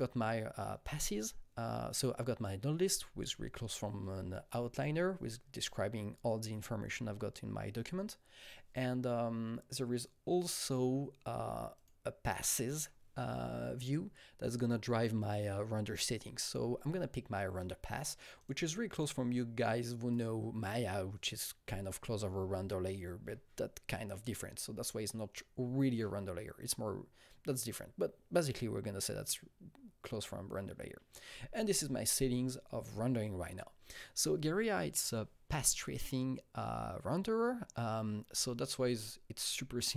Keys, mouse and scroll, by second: 1.5 click, 1.9 click, 11.7 click, 18.4 click, 20.1 click.